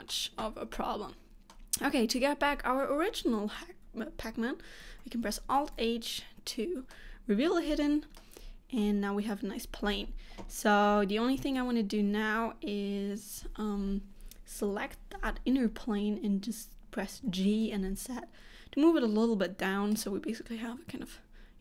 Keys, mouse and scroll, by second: 0.9 middle click, 4.9 alt+h, 6.2-7.0 scroll down 1, 7.0 middle click, 7.8 scroll up 1, 8.3 shift+middle click, 9.7-10.8 scroll up 2, 11.5 alt+a, 13.7 3, 14.7 l, 17.3 g.